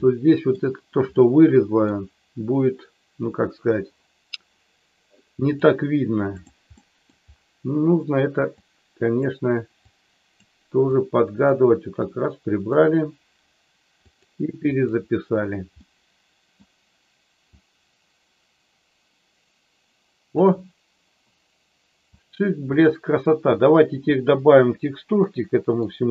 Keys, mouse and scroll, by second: 0.0 middle click, 1.1 middle click, 5.5-6.5 drag, 6.7 middle click, 8.5 click, 9.7 click, 10.8 click, 12.0 click, 14.1 click, 14.6 click, 15.7 middle click, 17.6-20.4 drag, 22.1 click, 25.1 middle click.